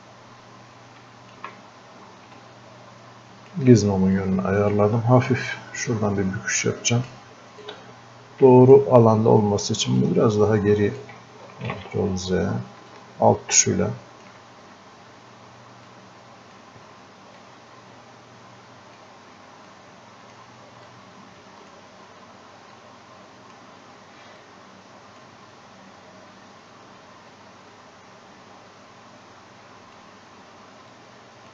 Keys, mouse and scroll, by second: 11.7 ctrl+z, 12.9-27.3 alt+drag, 27.7-30.2 drag, 31.3 click.